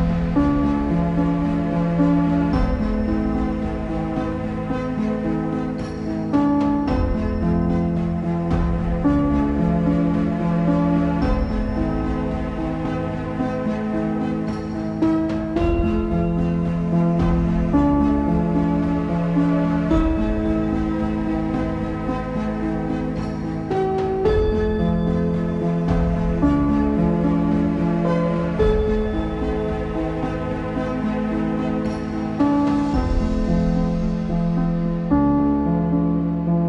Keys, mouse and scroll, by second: 0.3 z, 0.5 shift+middle click, 1.1 click, 1.5-1.9 scroll up 4, 1.9 click, 2.1 shift+middle click, 2.7 s, 3.7 g, 6.6 click, 6.9-8.2 scroll down 5, 8.2 s, 9.5 scroll up 2, 9.9 Tab, 10.5 ctrl+r, 12.3 z, 12.9 3, 14.0 click, 14.8-15.7 scroll up 2, 15.7 alt+e, 18.7 Tab, 19.2 z, 19.4-21.7 middle drag, 21.7 KP_Divide, 23.7 shift+a, 24.1-25.4 scroll down 21, 25.4 s, 27.0 click, 27.2-27.5 scroll up 8, 27.5 s, 28.3-28.7 scroll up 4, 28.7 shift+click, 30.0 ctrl+c, 30.4 click, 30.7 s, 31.9-32.4 scroll up 3, 32.4 click, 33.5 shift+middle click, 33.9 scroll up 2, 34.9 s, 36.5 click.